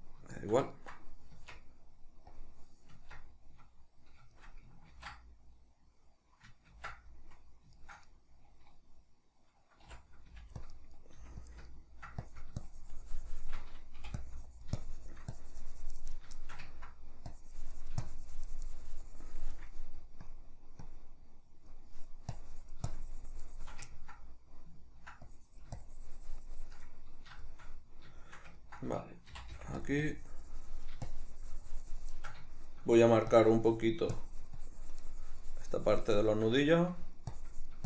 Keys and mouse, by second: 0.4-2.4 shift+middle drag, 1.4 Tab, 2.4-4.4 drag, 2.9 Tab, 4.4-7.8 shift+middle drag, 5.3 ctrl+d, 9.9 c, 10.7 click, 10.7 middle click, 11.1 f, 11.5 click, 11.7 ctrl+middle click, 12.2 click, 16.4 ctrl+shift+middle click, 17.3-23.9 drag, 23.9-25.3 ctrl+middle drag, 25.3-26.9 drag, 26.9-29.9 middle drag, 29.3 c, 30.0-32.5 drag, 32.5 shift+middle click, 33.4-36.6 drag, 36.6 shift+middle click, 37.4-37.8 drag.